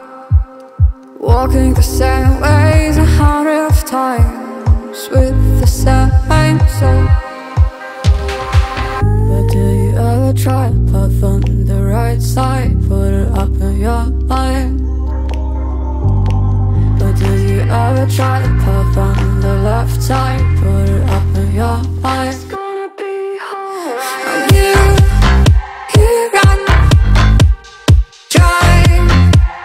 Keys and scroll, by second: 9.9 ctrl+g, 11.4 ctrl+t.